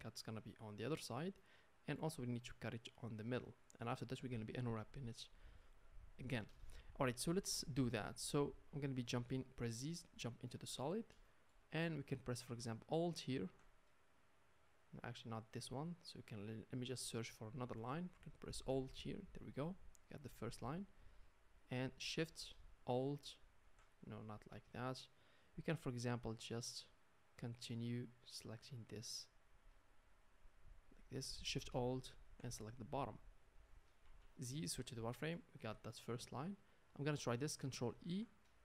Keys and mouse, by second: 9.1 z, 13.4-23.0 alt+middle drag, 23.0 alt+shift+click, 23.1 alt+shift+middle click, 24.3 ctrl+z, 26.3 shift+middle click, 27.3 shift+click, 27.4-28.4 shift+middle drag, 28.4 shift+click, 28.5 shift+middle click, 28.9 shift+click, 29.0-31.9 shift+middle drag, 31.9 alt+shift+click, 32.1-38.6 alt+shift+middle drag, 34.0 z, 37.9 ctrl+e.